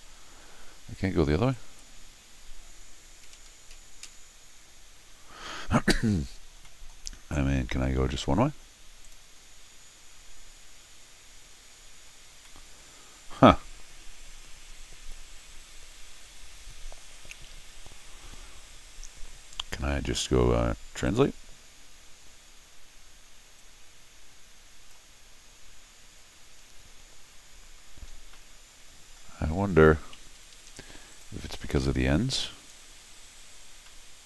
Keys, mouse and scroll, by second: 1.5 click, 6.6 middle click, 9.0 click, 12.3 scroll down 1, 12.6 middle click, 21.1 click, 23.6-24.9 drag, 28.1 scroll down 2, 28.3 middle click, 30.4 Escape, 30.6 Escape, 30.7 Escape, 31.1 click, 31.8 Tab, 32.6 scroll up 2, 32.7-33.1 scroll down 4, 33.4 scroll up 2, 33.9 middle click.